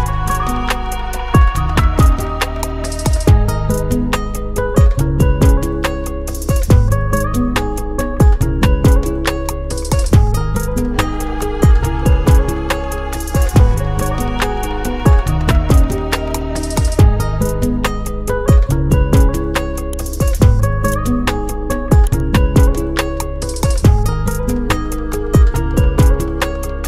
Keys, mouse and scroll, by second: 0.9 click, 3.2 click, 4.1-4.6 scroll up 1, 5.1 scroll down 1, 5.8-6.4 scroll up 1, 6.9 click, 8.8 click, 8.9 double click, 11.0 click, 24.3 click, 25.6 click, 25.9 double click, 26.7 F4.